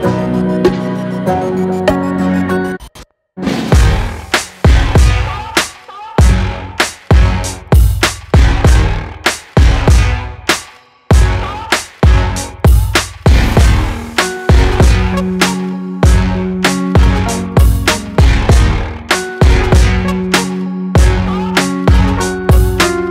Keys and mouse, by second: 10.0-11.1 middle drag, 11.1 click, 13.4-14.7 shift+drag, 15.5-23.1 drag.